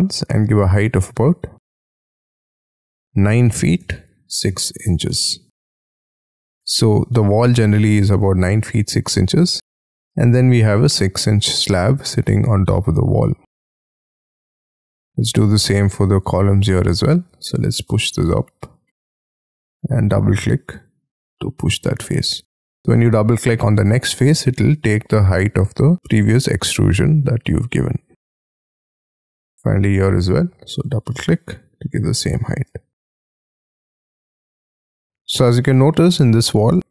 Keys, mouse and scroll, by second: 0.6 typing, 2.4 BackSpace, 2.6 BackSpace, 3.1 9, 4.5 6, 5.1 shift+', 5.6 Return, 6.5 middle click, 7.1 space, 7.4 Escape, 7.6 Escape, 7.9 middle click, 8.2 t, 10.3 space, 13.2 middle click, 14.7 middle click, 16.2 double click, 17.3 p, 19.8 double click, 20.3 middle click, 22.2 scroll down 7, 22.9 scroll up 6, 24.6 space, 24.8-26.0 scroll down 2, 26.0 middle click, 28.8 middle click, 29.5-31.0 scroll up 11, 30.2 p, 31.0 double click, 31.3-31.8 scroll down 6, 31.8 middle click, 32.6-33.8 scroll down 11, 33.8-35.1 scroll up 20, 35.3-35.8 scroll down 6, 35.8 scroll up 3, 36.4 scroll down 4.